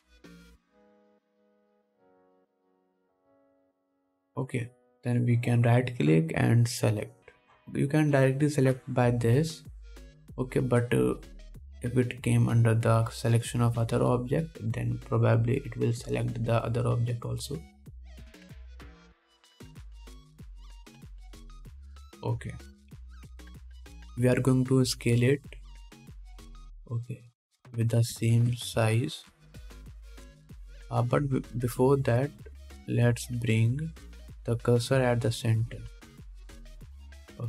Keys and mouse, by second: 3.5-9.0 shift+middle drag, 9.0-10.0 drag, 10.0-19.1 middle drag, 19.1-20.1 drag, 20.1 middle click, 20.2-26.9 drag, 24.2 KP_1, 26.9-29.0 middle drag, 27.7 s, 29.0-33.4 drag, 29.6 ctrl+z, 33.6 shift+s.